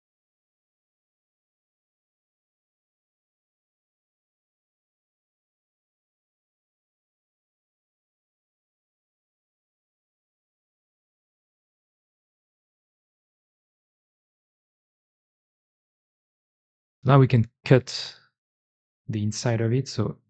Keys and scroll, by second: 1.1 Tab, 4.6 2, 5.1 alt+x, 5.6 Escape, 6.1 ctrl+s, 6.9 alt+x, 7.2 f, 8.1 2, 9.3 j, 10.6 1, 12.2-16.9 typing, 12.8 Escape, 13.4 Escape, 14.7 Escape.